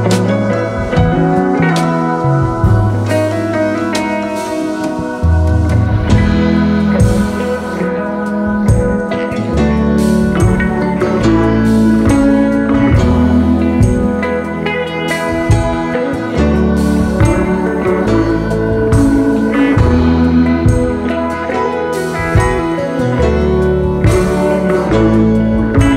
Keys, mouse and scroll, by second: 0.7-1.4 scroll up 1, 1.4-4.0 scroll down 1, 8.7 alt+scroll down 1, 9.5 alt+scroll up 2, 20.5 double click, 20.9 right click, 22.5 double click, 22.9 alt+scroll down 2, 23.3 space, 24.0 alt+scroll down 1.